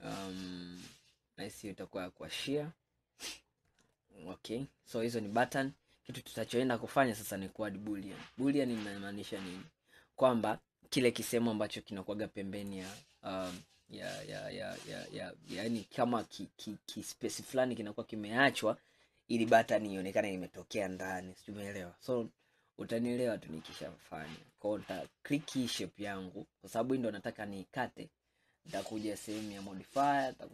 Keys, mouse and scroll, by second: 2.1-2.4 scroll down 2, 2.4-3.6 middle drag, 3.6-4.1 scroll down 4, 4.1-5.8 middle drag, 5.8-6.6 scroll up 5, 6.6-8.7 middle drag, 8.7 click, 9.5-12.5 middle drag, 12.7 click, 13.7-16.7 middle drag, 22.0-22.6 scroll up 1, 22.6-23.0 scroll down 2, 23.3-25.0 middle drag, 25.0 click, 29.6 click.